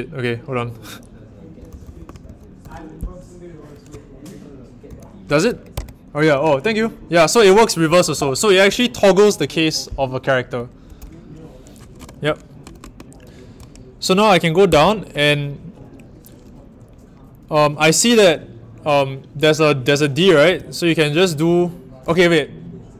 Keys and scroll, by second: 0.0-2.6 typing, 4.8 b, 5.7 shift+`, 7.6-8.6 typing, 14.6 i.